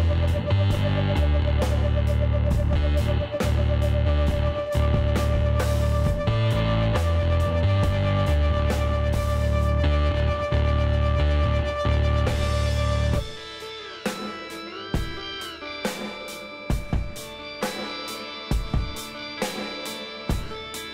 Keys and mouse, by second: 0.7 click, 1.0 Tab, 2.4 KP_1, 7.0 a, 7.8 shift+a, 13.0 middle click, 13.3-15.2 drag, 15.3-17.8 middle drag, 17.4 g, 20.3-20.9 drag.